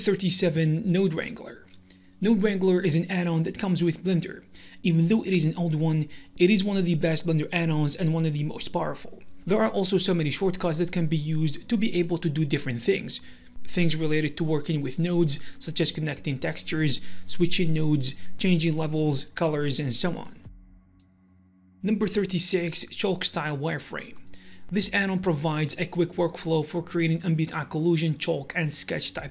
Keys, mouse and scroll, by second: 0.6 click, 0.9 g, 1.4 click, 1.8 ctrl+shift+Delete, 1.8 middle click, 2.1 ctrl+shift+click, 3.3 ctrl+shift+click, 4.3 alt+right click, 6.0 click, 6.4 alt+s, 6.7 alt+s, 6.9 alt+s, 7.2 alt+s, 7.9 ctrl+right click, 11.0 click, 11.6 ctrl+shift+right click, 12.4 middle click, 13.1 Delete, 13.1 click, 14.9 click, 14.9 shift+s, 16.0 click, 17.4 ctrl+right click, 18.2 k, 19.3 click, 20.4 shift+p, 21.5 F9.